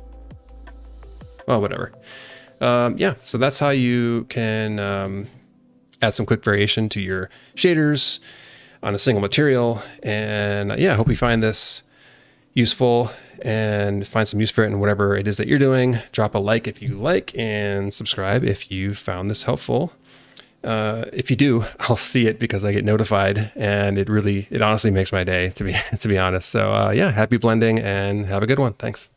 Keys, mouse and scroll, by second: 0.5-1.0 scroll down 3, 1.0 alt+middle click, 3.0 scroll down 1, 3.3 alt+shift+middle click, 4.8 click.